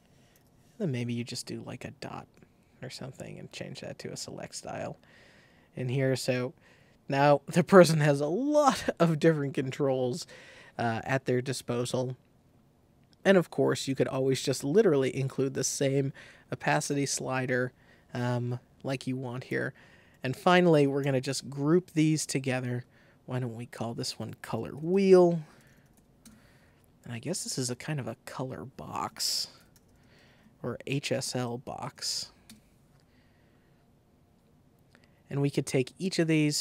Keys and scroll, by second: 0.3 o, 1.3 shift+o, 19.4 super+g, 20.9 super+g, 24.1-26.4 typing, 28.9-32.6 typing, 30.2 super+a.